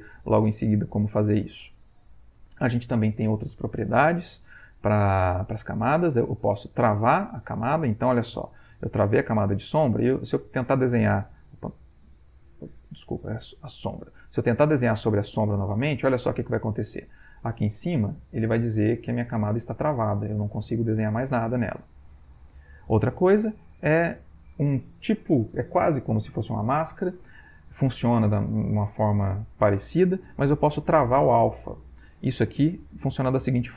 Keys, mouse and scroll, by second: 6.8 click, 10.0 click, 11.6 click, 12.9 click, 15.3-16.6 drag, 20.4 click, 21.0 click, 22.6 click, 33.1 click.